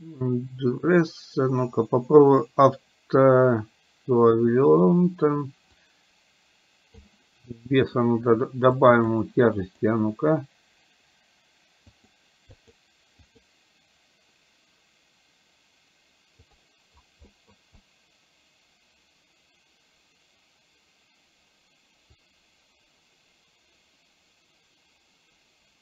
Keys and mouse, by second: 5.7-7.0 drag, 7.6 middle click, 8.9 click, 9.6 click, 12.0 click, 12.6 click, 13.2 click, 16.5 click, 17.4 middle click, 17.7-25.8 drag.